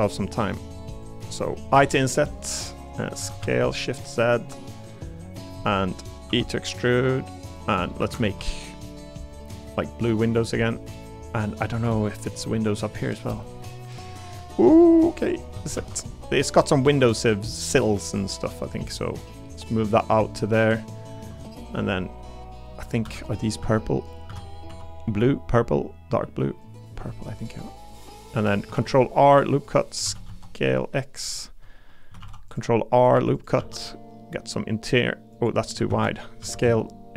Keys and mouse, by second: 0.9 shift+click, 1.7 i, 3.2 s, 3.4 z, 5.3 click, 5.6 middle click, 5.7 click, 6.3 e, 7.4 click, 8.0 a, 8.2 g, 10.9 click, 11.5 middle click, 11.8 3, 12.6 middle click, 13.0 middle click, 13.6 middle click, 13.9 middle click, 14.7 middle click, 15.2 click, 15.7 shift+d, 16.8 e, 18.0 click, 18.6 click, 22.8 click, 23.6 a, 24.3 a, 24.7 g, 26.6 click, 27.5 click, 28.7 ctrl+r, 29.6 click, 30.0 s, 30.2 x, 31.2 click, 31.8 3, 32.2 ctrl+r, 33.1 3, 33.3 click, 33.6 e, 35.9 ctrl+z, 36.4 s, 36.6 x.